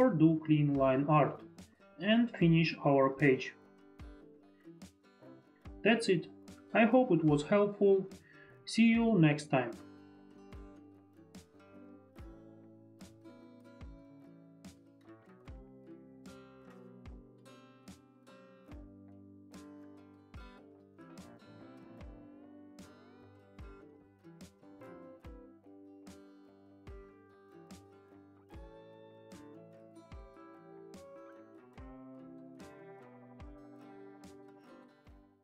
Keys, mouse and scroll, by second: 1.0 ctrl+z, 1.0 click, 1.2 ctrl+z, 1.2 click, 3.3 click, 4.2 click, 10.4 click, 11.5 click, 12.7 click, 15.5 ctrl+click, 16.0 ctrl+click, 17.6 click, 19.5 Caps_Lock, 19.5 click, 20.0 ctrl+click, 21.2 ctrl+click, 21.9 ctrl+click, 22.0 ctrl+click, 22.2 Caps_Lock, 22.5 ctrl+click, 25.3 click, 29.3 click.